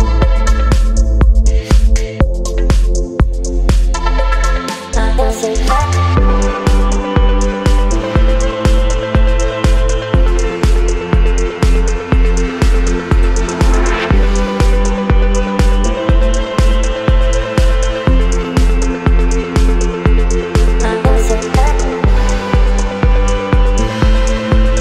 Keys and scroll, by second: 4.1 ctrl+t, 6.8 Return, 8.5 space, 12.0 space, 14.2 ctrl+t, 16.6 shift+Return, 17.6 space, 19.7 Down, 19.9 Down, 20.0 Down, 20.1 Down, 20.3 Down.